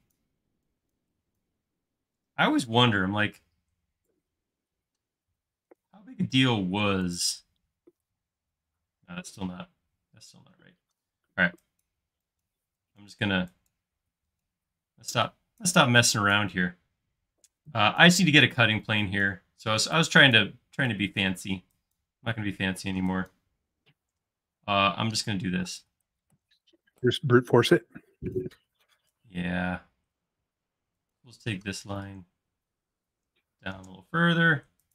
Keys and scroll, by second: 3.5 l, 8.2 space, 9.5 e, 10.7-11.9 typing, 25.3 l.